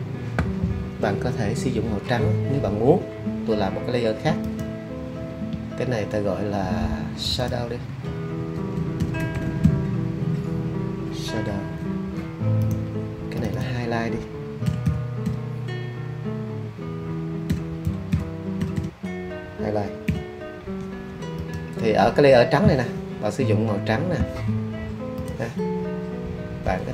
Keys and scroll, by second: 8.5 alt+s, 8.7-10.1 typing, 11.4 w, 14.4-15.7 typing, 17.2-20.0 typing.